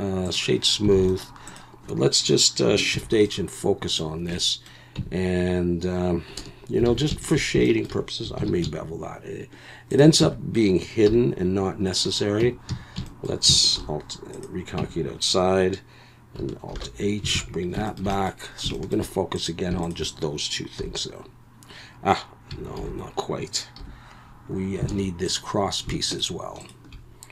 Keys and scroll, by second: 0.9 alt+a, 2.9 shift+h, 5.0 Tab, 6.8 alt+a, 8.4 ctrl+b, 10.2 Tab, 11.0 /, 12.4 Tab, 12.7 a, 13.8 alt+n, 14.8 Tab, 16.7 alt+h, 17.3 alt+a, 20.8 /, 22.8 alt+h, 23.8 /, 24.9 alt+a.